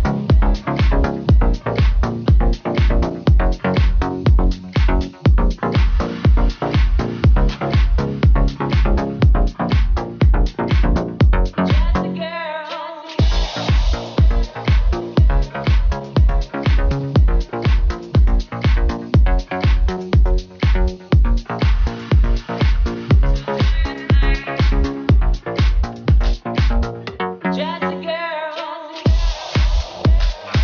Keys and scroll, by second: 2.4 Left, 3.5 Down, 3.6 Left, 4.2 Down, 5.4 BackSpace, 5.6 Return, 6.8 2, 6.9 Return, 7.6 Up, 8.0 Up, 8.2 Down, 8.3 Left, 9.2 super+v, 10.8 super+c, 12.1 super+v, 12.2 Return, 14.2 Right, 17.7 Left, 17.9 BackSpace, 18.0 Return, 19.2 super+v, 19.4 Right, 19.8 Left, 20.2 Right, 22.3 super+c, 24.7 Return.